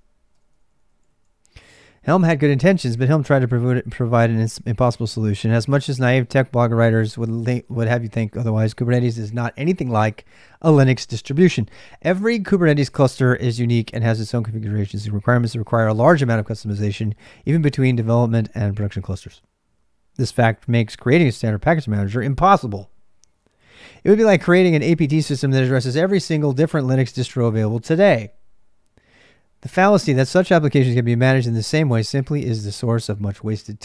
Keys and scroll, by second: 0.0-33.8 typing.